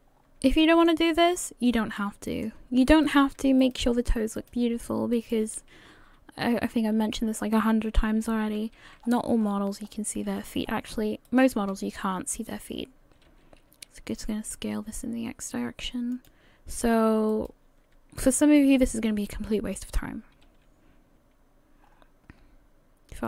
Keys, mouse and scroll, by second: 0.1 scroll down 5, 0.6 shift+middle click, 1.1-1.5 scroll up 2, 2.0 middle click, 2.9 right click, 3.6 shift+right click, 4.4 right click, 5.1 right click, 7.0 g, 11.7 s, 17.3 right click, 18.2 shift+right click, 19.8 s.